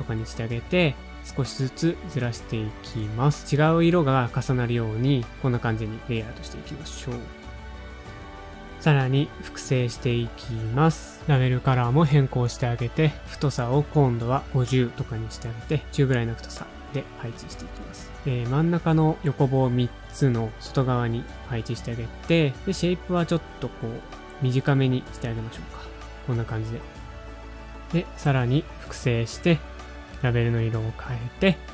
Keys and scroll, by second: 0.4-1.2 typing, 4.7 shift+Up, 4.8 shift+Up, 5.5 super+Up, 5.8 shift+Down, 5.8 shift+Down, 5.9 shift+Right, 6.0 shift+Right, 6.2 shift+Up, 6.6 shift+Right, 6.6 shift+Up, 6.8 shift+Right, 8.2 shift+Down, 8.4 shift+Down, 8.5 ,, 8.6 shift+Right, 9.0 shift+Right, 9.1 shift+Up, 9.3 shift+Down, 9.5 shift+Left, 9.6 shift+Left, 9.8 shift+Right, 9.9 shift+Right, 11.7 super+d, 11.8 super+], 11.9 super+[, 15.1-15.9 typing, 20.0 ctrl+a, 21.7 ctrl+a, 24.0 super+Down, 24.3 super+Up, 24.4 super+Up, 24.6 ctrl+a, 28.1 super+d, 28.6 super+], 28.8 super+[.